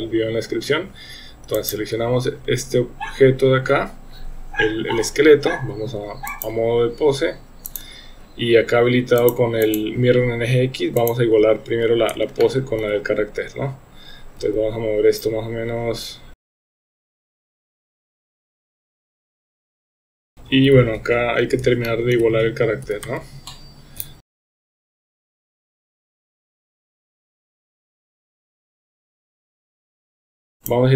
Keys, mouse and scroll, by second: 1.5 click, 6.4-7.8 drag, 9.2 click, 9.6 click, 12.4-12.8 shift+middle drag, 14.4 g, 17.1 click, 17.6-20.7 typing, 17.9 click, 18.1 click, 18.5 shift+middle click, 18.8 click, 19.5 shift+middle click, 19.8 shift+middle click, 19.8 Tab, 19.9 Tab, 20.2 click, 21.8-22.2 shift+middle drag, 22.8 g, 24.6-27.6 typing, 24.7 shift+middle click, 25.0 shift+middle click, 25.1 click, 25.9 shift+middle click, 26.3 click, 27.4 middle click, 27.5 middle click, 27.6 Tab, 27.7 Tab, 27.9 click, 28.0 Tab, 28.1 Tab, 28.5 shift+middle click, 29.0 click, 29.1 Tab, 29.2 Tab, 29.3 shift+middle click, 29.4 drag, 29.6 g, 29.9 KP_3, 30.1 middle click, 30.1 KP_1, 30.2 KP_1, 30.2 shift+middle click, 30.3 Tab, 30.3 Tab, 30.6-30.9 drag.